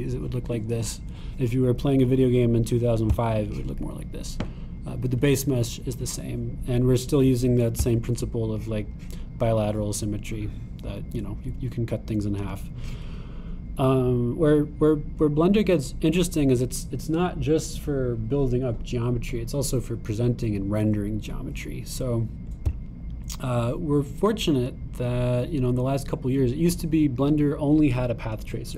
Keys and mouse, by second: 4.1 click, 8.8 click, 13.4 click.